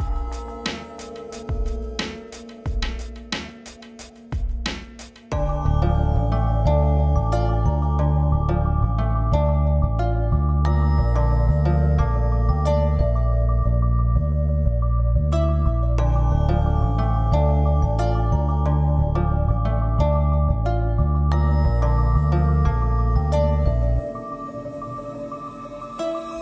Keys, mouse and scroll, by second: 0.9 click, 1.9 v, 3.3 click, 3.9-4.7 typing, 6.2-6.5 alt+drag, 8.9-10.4 typing, 11.5-13.7 drag, 14.6 Left, 16.5 a, 17.5 click, 18.5 shift+click, 21.9-22.3 click, 22.9 v, 24.3-26.1 drag.